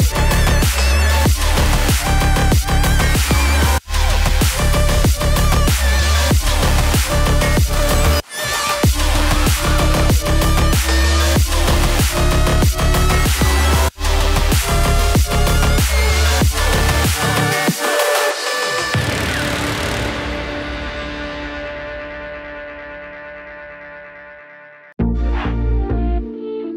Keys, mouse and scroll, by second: 2.4 5, 2.6 Return, 8.8-11.7 drag, 13.1-14.0 typing, 15.2-18.1 drag, 18.2-19.9 typing, 18.5 click, 21.4 typing, 22.9-25.3 drag, 24.3 typing, 26.1-26.7 typing.